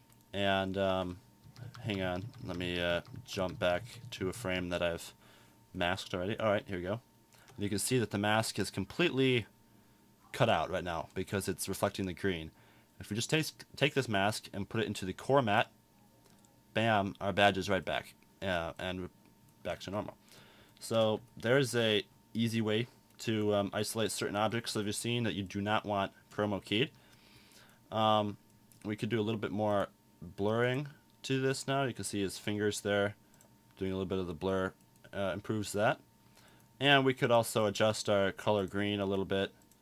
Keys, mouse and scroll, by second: 1.5 Left, 1.8 Left, 1.9 Left, 2.1 Left, 2.3 Left, 2.5 Left, 2.7 Left, 3.0 Left, 3.3 Left, 3.5 Left, 3.6 Left, 3.9 Left, 4.1 Left, 4.3 Left, 4.5 Left.